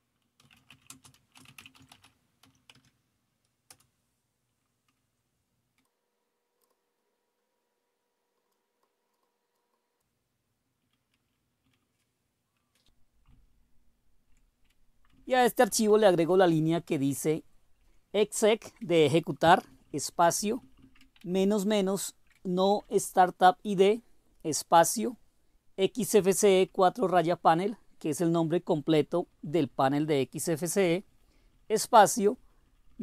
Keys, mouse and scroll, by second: 0.0-4.0 typing, 5.8-8.4 Down, 8.8-10.0 Down, 10.7 Down, 11.2 Down, 11.6 Down, 13.3-14.3 Up, 15.1 Down, 15.5 Down, 15.7 Down, 15.9 Down, 16.0 Down, 16.2 Down, 17.7 Delete, 18.1 Delete, 18.6 Delete, 19.6 Down, 19.8 Down, 20.0 Down, 20.2 Down, 20.4 Down, 20.5 Down, 20.8 Down, 21.3-22.3 Up, 22.4 typing, 22.7 Down, 23.0 Down, 25.8 Right, 26.2 Right, 26.4 Right, 28.9 Right, 29.2 Right, 29.6 Right, 29.9 Right, 30.3 Right, 30.6 Right, 30.8 Right, 31.2 Right, 31.5 Right, 31.6 Right, 31.8 Right, 32.3 Right, 32.5 Right, 32.6 Right, 32.9 Right.